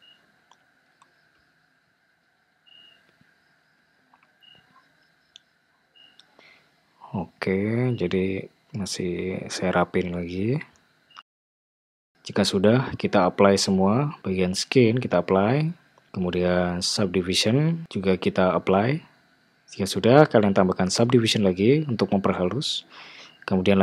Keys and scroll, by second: 0.1 g, 9.8 super+z, 11.5 Tab, 11.9 alt+z, 13.1 super+z.